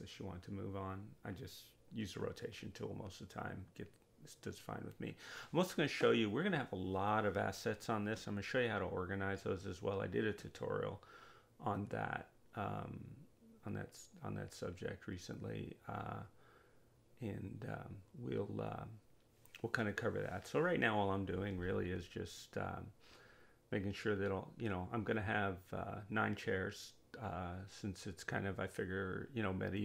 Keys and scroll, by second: 27.6 0, 27.7 Return.